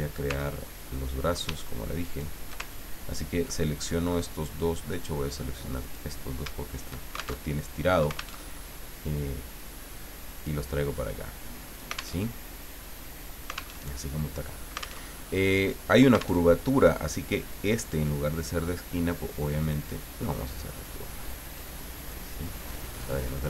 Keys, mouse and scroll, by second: 0.4 ctrl+scroll down 2, 2.0 shift+click, 2.7-3.2 ctrl+shift+scroll down 3, 3.6 ctrl+click, 5.8 click, 6.7 shift+click, 7.4 alt+shift+Tab, 8.4 alt+Tab, 9.5-12.1 drag, 12.1 alt+Tab, 13.7 alt+Tab, 15.1 alt+Tab, 16.4 alt+Tab, 17.8 click, 19.6 click, 21.5-23.1 drag.